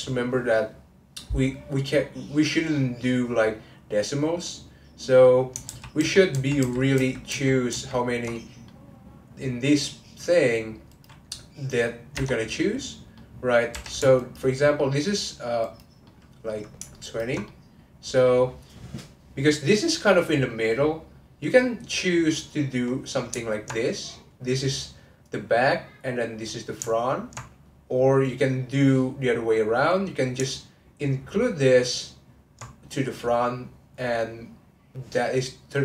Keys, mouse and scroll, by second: 2.0-2.7 scroll up 3, 2.7-5.4 middle drag, 5.4 scroll down 1, 5.6 ctrl+z, 6.0-7.7 ctrl+z, 8.3 middle click, 8.8-9.8 scroll up 1, 9.8-10.9 scroll up 1, 10.9 click, 13.1 middle click, 13.7 3, 14.2 alt+click, 14.8 middle click, 15.6 click, 16.0-17.0 middle drag, 17.0 ctrl+click, 17.4-20.5 middle drag, 20.9-22.8 middle drag, 22.8 click, 23.5 ctrl+click, 24.3-26.1 middle drag, 26.1 click, 26.4 middle click, 27.1 ctrl+click, 27.7 middle click, 28.4 click, 28.7-31.4 middle drag, 31.4 ctrl+click.